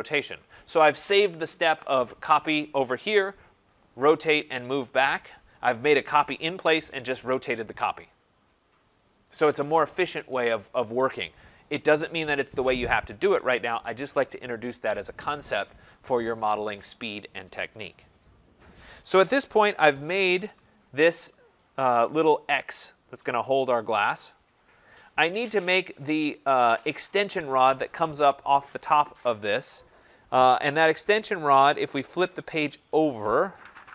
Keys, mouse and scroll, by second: 20.7 click, 22.3-22.7 scroll, 24.7 right click, 25.3-25.7 scroll.